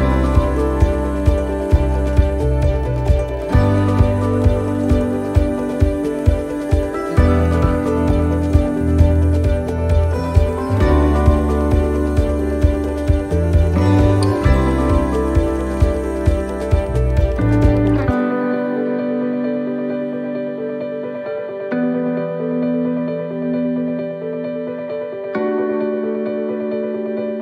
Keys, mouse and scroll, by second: 1.1 click, 3.1 a, 4.6 click, 7.3 middle click, 8.7 click, 15.6 middle click, 16.7-17.9 scroll down 2, 17.1 middle click, 20.2 shift+d, 23.7 click.